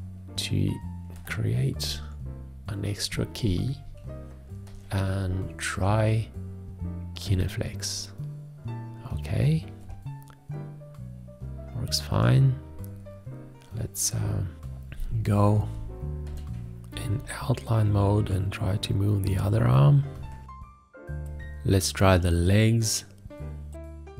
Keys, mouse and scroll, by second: 14.5 F3.